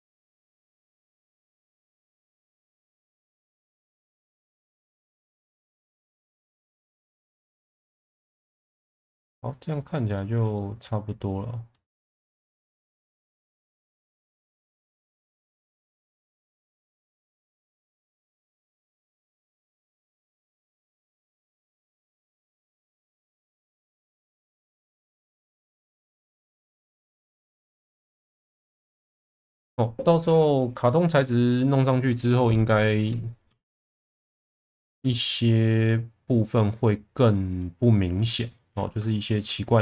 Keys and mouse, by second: 1.1 click, 1.5 shift+v, 2.6 click, 3.5 click, 3.8 shift+v, 4.7 click, 6.2 shift+v, 6.7 click, 6.9 Tab, 7.6-8.0 alt+middle drag, 9.7-10.1 middle drag, 10.5-11.7 middle drag, 11.9 Tab, 12.6 shift+middle click, 12.9 middle click, 14.2 shift+middle click, 16.2 click, 18.7 click, 21.2 ctrl+z, 21.6 ctrl+z, 22.5 shift+Tab, 23.7 click, 24.6 click, 26.7 alt+middle click, 27.8 Tab, 28.2 shift+middle drag, 29.2 click, 32.8 shift+middle click, 33.3 click, 33.5 Tab, 34.9 1, 35.3-35.8 drag, 36.4 click, 38.4 click, 39.1 shift+middle click.